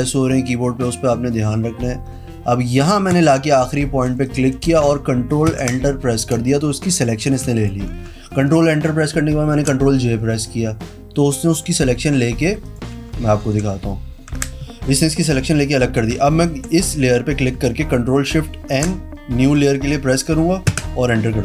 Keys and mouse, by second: 3.2 click, 4.3 space, 4.3 click, 5.6 ctrl+KP_Enter, 6.5 space, 6.6 click, 7.4 z, 7.7 alt+click, 9.6 ctrl+k, 12.8 click, 13.6 ctrl+shift+n, 14.4 Escape, 18.9 ctrl+shift+n, 20.8 KP_Enter.